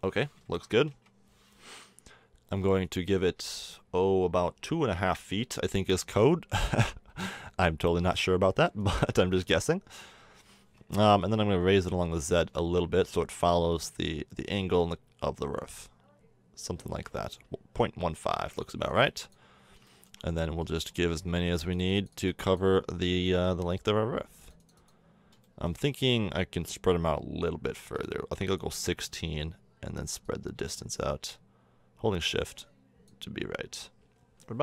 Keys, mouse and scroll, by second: 0.4 KP_1, 0.4 KP_2, 8.1-13.1 drag, 18.2 middle click, 18.9-21.2 drag, 21.5-26.7 drag.